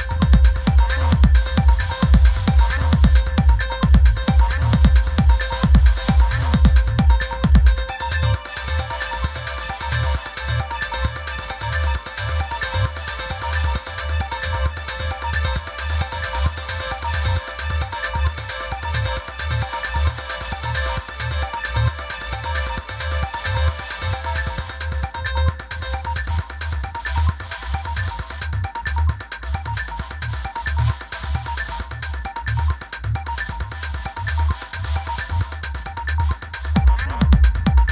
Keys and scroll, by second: 17.1 i.